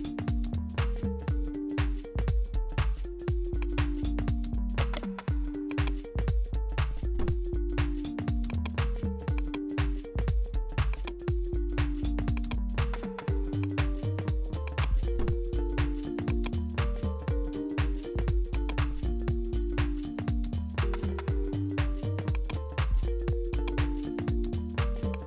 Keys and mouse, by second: 2.6 Tab, 3.6 click, 4.2 3, 4.7 right click, 5.7 click, 6.3-7.7 drag, 7.7 e, 8.6 s, 10.1 s, 11.2 e, 12.5 s, 14.1 e, 15.0 s, 16.9 g, 20.3 s, 23.0 e, 23.7 s.